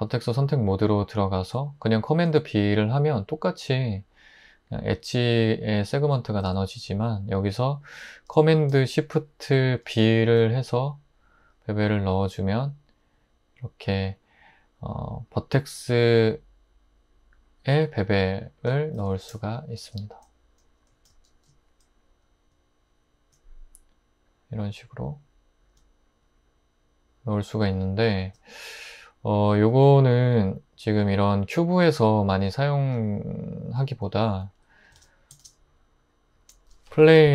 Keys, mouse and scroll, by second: 2.2 super+b, 6.4 super+z, 9.8 shift+super+b, 19.0 super+z, 21.3 shift+super+b, 32.3 super+z, 33.0 Tab, 34.3 x, 35.4 shift+a, 37.2-37.3 typing.